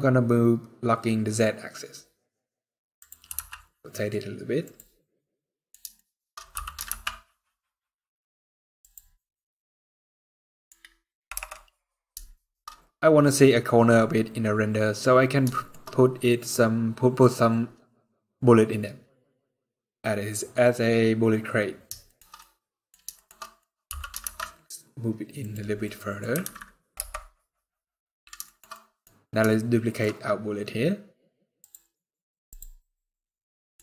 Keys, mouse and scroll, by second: 2.9 r, 4.7 middle click, 5.6 shift+middle click, 6.2 g, 8.9 middle click, 10.4-11.0 scroll up 1, 11.0 KP_0, 12.0 shift+middle click, 12.3 scroll up 5, 13.5-14.1 scroll down 4, 14.1 scroll up 3, 14.9 scroll down 2, 15.2 shift+middle click, 15.5 scroll up 2, 18.0 scroll up 3, 18.6 scroll down 5, 19.6 scroll down 2, 20.0 scroll up 2, 21.7 shift+middle click, 22.0 middle click, 22.8 shift+middle click, 23.1 middle click, 23.3-23.8 scroll up 2, 23.6 g, 25.4 scroll down 3, 25.5 middle click, 26.1 alt+a, 26.6 KP_0, 28.1 shift+middle click, 28.4 middle click, 28.8 scroll up 2, 29.2 shift+middle click, 29.7 scroll up 3, 30.4-31.2 scroll down 2, 31.3 click, 32.0 click, 33.2 middle click.